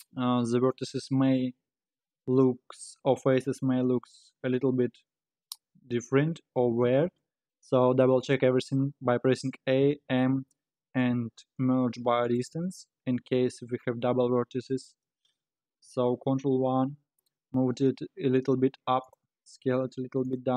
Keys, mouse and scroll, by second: 3.8 scroll down 2, 4.0 Tab, 6.1-7.4 scroll up 3, 7.4-9.2 scroll up 2, 9.3 a, 10.0 m, 13.2 Tab, 14.1-15.3 middle drag, 15.3 KP_1, 16.5 ctrl+KP_1, 17.6 g.